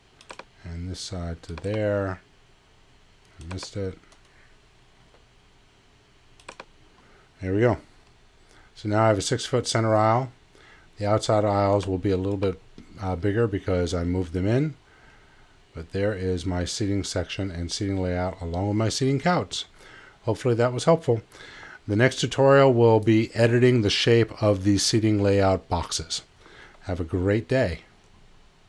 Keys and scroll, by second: 5.0 z.